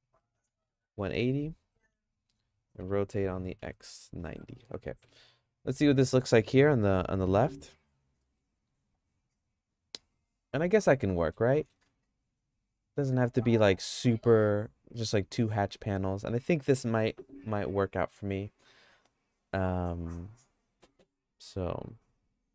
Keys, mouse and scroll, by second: 2.8 r, 8.2 middle click, 8.6 s, 11.1 middle click, 11.6 middle click, 11.8-15.9 shift+middle drag.